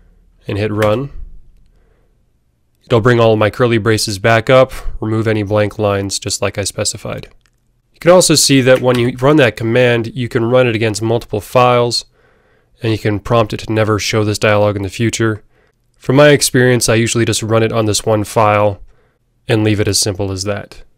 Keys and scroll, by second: 8.7 alt+super+l, 8.9 alt+super+l.